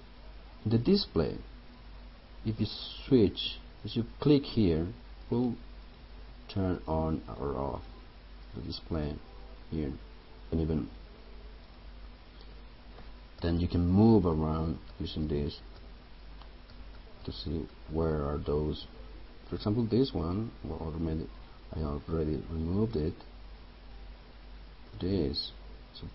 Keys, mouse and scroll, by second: 10.5 right click, 11.8 click, 13.5 Up, 14.4 Down, 15.9 Up, 16.8 Down, 23.1 click.